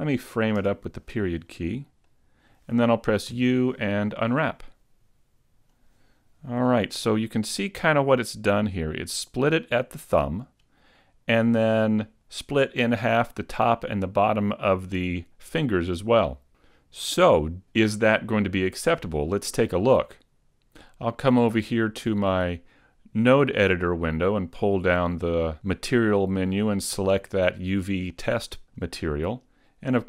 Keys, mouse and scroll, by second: 0.6 KP_Decimal, 2.1 middle click, 3.3 u, 18.0 middle click, 22.5 click.